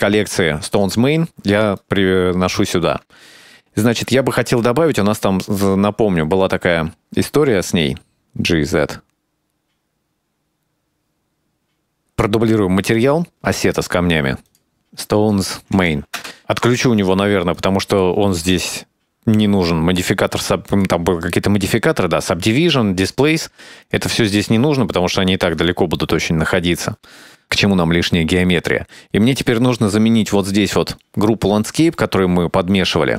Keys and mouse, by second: 2.4-3.4 shift+middle drag, 4.0 shift+middle click, 5.1-6.9 ctrl+middle drag, 7.0-7.9 shift+middle drag, 8.3 g, 11.5 click, 11.6 click, 14.3 click, 14.7-16.6 drag, 15.6 BackSpace, 17.2 click, 17.6 click, 19.5 click, 25.1 click, 25.9 click, 31.2 click, 31.6 middle click.